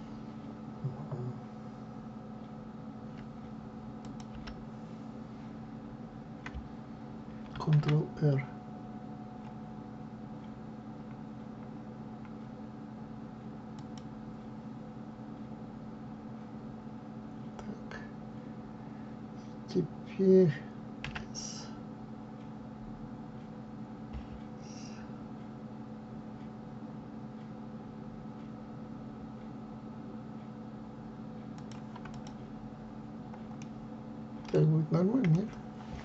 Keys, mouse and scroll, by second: 3.9 click, 4.2 l, 32.0 click, 33.5-36.0 middle drag.